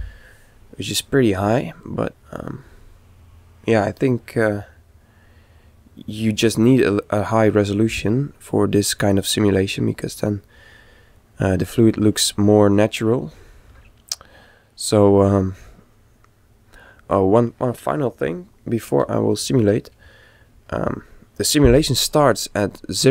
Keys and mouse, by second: 1.8-3.7 middle drag, 11.3-13.2 middle drag, 22.3 click.